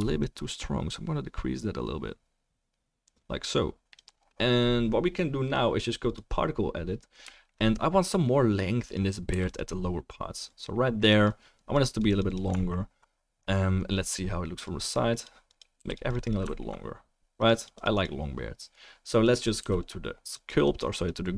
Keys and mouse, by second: 9.3 f, 9.5-10.5 drag, 12.6-13.7 alt+middle drag, 13.7-15.9 drag, 13.7-16.1 right drag, 15.8 f, 16.1 click, 16.5 alt+click, 16.5 alt+middle click, 16.5 alt+right click, 19.8 f, 19.8-20.3 drag.